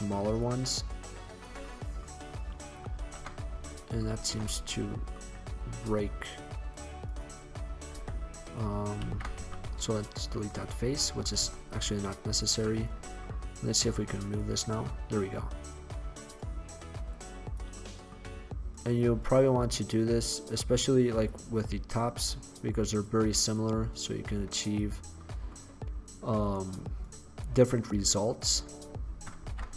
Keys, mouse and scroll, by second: 0.3 click, 0.3 right click, 0.4 middle click, 0.6 click, 0.6 right click, 0.6 middle click, 1.8-2.8 middle drag, 3.0 ctrl+z, 4.2 ctrl+z, 6.8 middle click, 8.1 x, 9.2 ctrl+z, 9.6 x, 11.1 Tab, 11.6 Tab, 13.2-14.7 middle drag, 14.7-15.7 drag, 15.7-17.2 middle drag, 17.9-18.8 middle drag, 18.9 middle click, 21.7 middle click, 23.1 middle click, 24.4 click, 27.9-29.0 right drag, 29.5 ctrl+z.